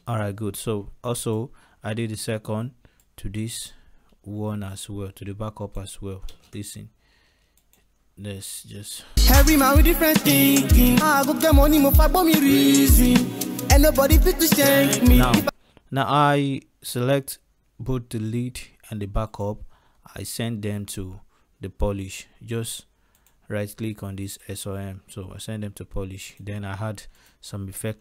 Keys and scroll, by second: 6.2 ctrl+space, 14.8 space.